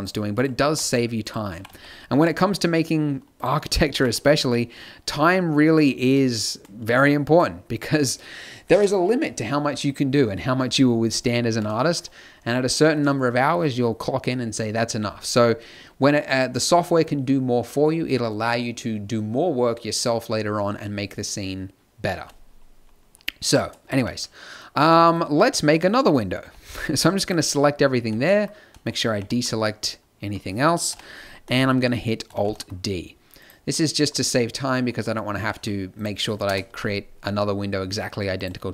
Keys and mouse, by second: 0.6 g, 1.5 g, 2.1 middle click, 3.9 g, 6.8 a, 10.9 middle click, 11.8-23.9 middle drag, 23.9 z, 26.3 b, 28.0 b, 29.0 b, 30.9 KP_7, 32.3 alt+d, 35.4 g, 36.4 KP_0, 36.6 z.